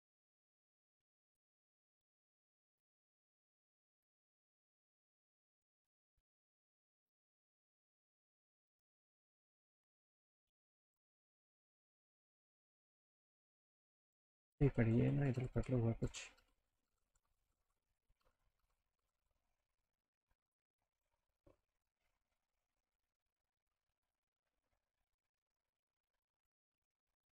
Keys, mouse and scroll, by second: 0.2 click, 1.0 alt+middle click, 1.8 middle click, 2.9 middle click, 4.7 ctrl+alt+middle click, 5.3 click, 5.7-6.1 scroll down 2, 6.1 middle click, 6.5 alt+middle click, 8.1 click, 8.5 click, 9.3 middle click, 10.9 click, 11.7 middle click, 12.1 middle click, 12.8 middle click, 14.6 ctrl+z, 15.2 ctrl+z, 16.4 ctrl+z, 16.7 ctrl+z, 16.9 ctrl+z, 17.5 ctrl+z, 18.6 ctrl+z, 19.1 ctrl+z, 19.2 ctrl+z, 21.0 click, 21.3 scroll up 1, 24.0 click.